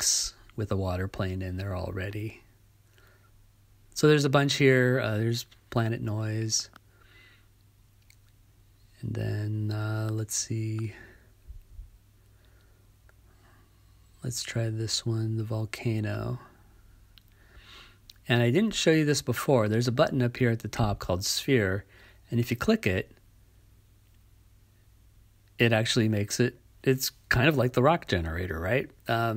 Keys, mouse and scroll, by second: 4.8 click, 25.0-27.6 drag.